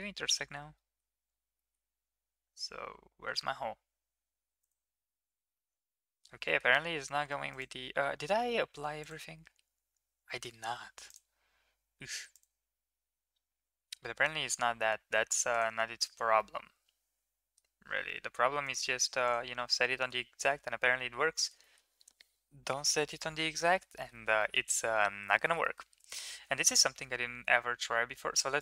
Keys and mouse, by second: 0.6 shift+middle drag, 1.4 middle drag, 4.5 click, 5.4-6.1 middle drag, 6.3 shift+middle click, 10.4 ctrl+a, 12.2 click, 14.5 ctrl+a, 16.2-17.4 middle drag, 18.5 click, 19.8 shift+middle click, 20.5 shift+middle drag, 21.2 shift+middle click, 21.5 middle drag, 23.5 shift+middle click, 23.8 middle click, 24.2 middle drag, 25.2 shift+middle drag, 25.5 middle click, 25.9 shift+middle click, 28.4-28.6 drag.